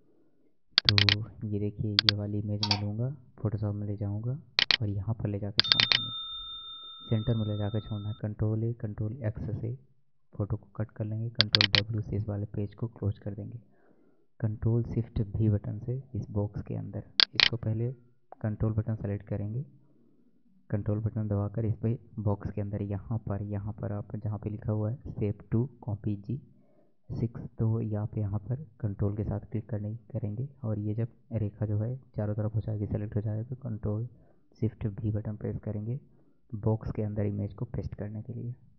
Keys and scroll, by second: 8.2 ctrl+a, 9.9 ctrl+w, 34.8 ctrl+shift+v.